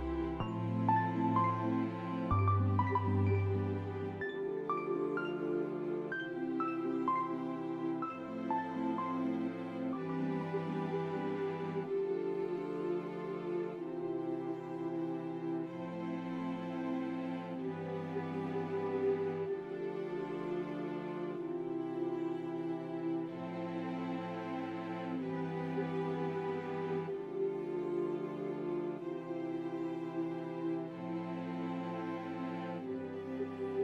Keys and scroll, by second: 3.7 BackSpace, 8.1 ctrl+z, 8.4 s, 9.0 F4, 9.6 F4, 10.5 s, 11.5 F4, 12.1 s, 13.6 F4, 16.8 s, 19.9 s, 21.8 p, 22.0 m, 25.7 shift+s, 26.9 shift+s, 27.4 s, 30.0 s, 30.5 s.